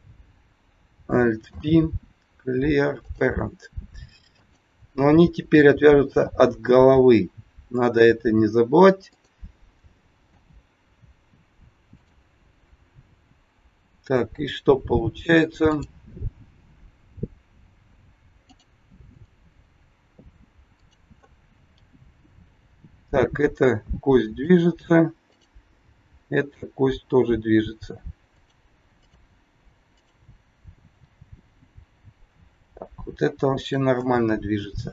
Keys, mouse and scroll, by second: 1.5 alt+p, 4.3 click, 6.0 alt+p, 9.0 click, 10.1 alt+p, 15.6 click, 18.4 click, 20.8 click, 21.8 g, 25.3 click, 25.8 g, 29.0 click, 29.9 click, 30.6 g, 34.8 scroll up 2.